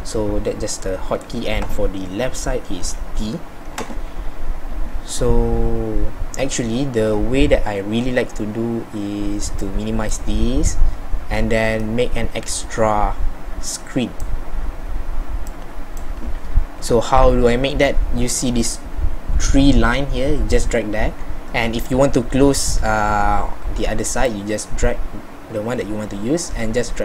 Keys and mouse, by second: 3.0 t, 13.4 middle click.